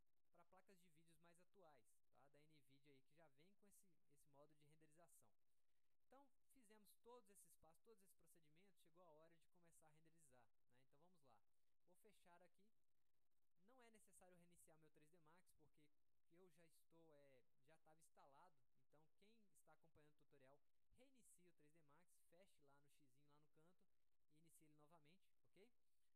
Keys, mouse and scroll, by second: 12.6 click, 13.4 click.